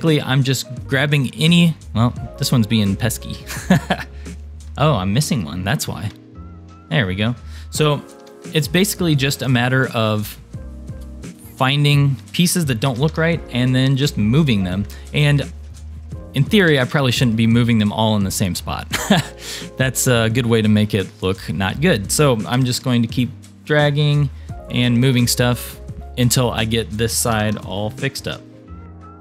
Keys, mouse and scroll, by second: 1.5 click, 2.8 click, 4.3 shift+click, 4.7 scroll up 3, 5.4 shift+middle click, 6.8 click, 8.2 g, 10.0 click, 10.3-10.7 scroll down 2, 10.8 shift+middle click, 11.4 click, 12.9 g, 15.5 shift+middle click, 15.9 shift+scroll down 1, 16.7 g, 19.1 click, 19.7 click, 20.3 shift+click, 21.2 shift+click, 22.5 g, 24.3 shift+middle click, 25.9 click, 25.9 scroll up 1, 26.4 click, 27.3 g, 28.8 click, 29.1-29.2 typing, 29.1 click.